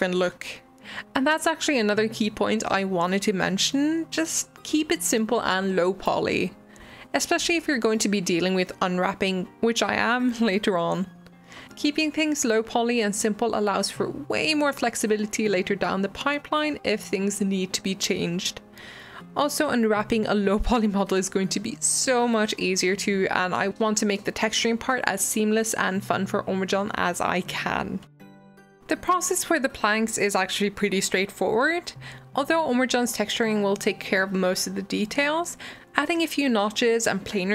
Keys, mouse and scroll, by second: 0.0 Delete, 0.3 middle click, 0.6 Tab, 1.4 alt+z, 1.6 s, 2.9 scroll up 1, 3.1 shift+middle click, 3.9 click, 4.4 click, 4.8 click, 5.1 ctrl+click, 5.4 ctrl+click, 5.6 ctrl+z, 5.7 ctrl+click, 6.1 ctrl+click, 6.4 scroll down 1, 6.6 e, 7.3 click, 7.5-8.3 scroll up 5, 8.3 g, 8.9 s, 11.2 s, 12.4 Tab, 12.5 r, 13.5 middle click, 13.7 scroll down 7, 14.0 middle click, 14.6 click, 14.7-15.1 scroll up 2, 15.1 shift+middle click, 15.5 g, 16.4 Tab, 16.6 g, 18.0 shift+right click, 18.5 s, 19.8 click, 20.3 ctrl+l, 21.1 r, 23.0 s, 23.9 g, 25.0 Tab, 25.1 middle click, 25.3-25.7 scroll down 2, 25.5 alt+z, 25.7-26.1 middle drag, 26.1 scroll up 1, 26.4 click, 26.5 scroll down 1, 26.7-28.9 shift+middle drag, 28.6 click, 29.0 click, 29.3 ctrl+b, 31.7 middle click, 32.1 g, 33.0 middle click, 33.3-33.8 scroll up 1, 33.8 click, 34.1 click, 34.3 middle click, 34.7 g.